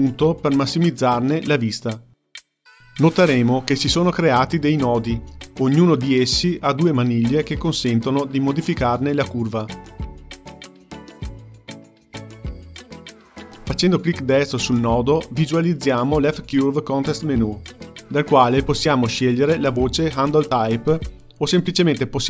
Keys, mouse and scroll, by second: 1.3-4.1 ctrl+middle drag, 6.0-9.0 drag, 10.1 click, 10.7-13.8 drag, 14.0-22.2 right drag.